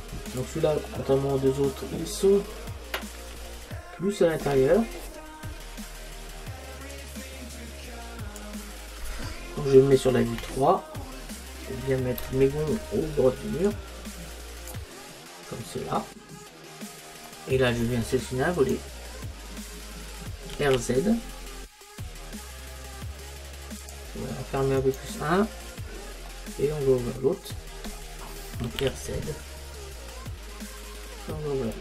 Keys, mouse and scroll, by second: 0.9 middle click, 2.7 middle click, 7.0 click, 10.4 KP_3, 11.3-13.7 middle drag, 13.7 click, 15.5-18.7 middle drag, 18.7-20.6 right drag, 20.6 r, 24.0 click, 25.9-28.1 right drag, 28.1 middle click, 28.7 r.